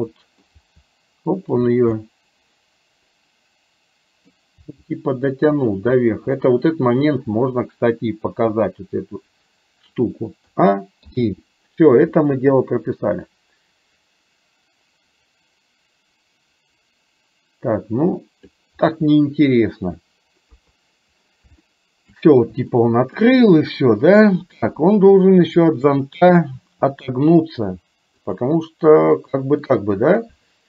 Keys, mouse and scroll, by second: 0.8 g, 2.0-4.4 middle drag, 4.7 g, 6.4 scroll up 1, 6.7 middle click, 7.2-7.6 scroll down 1, 10.5 a, 11.0 i, 13.3-18.7 drag, 20.5 KP_3, 21.7 shift+middle click, 22.8 shift+middle click, 25.2 click, 26.7 r, 29.8-30.6 middle drag.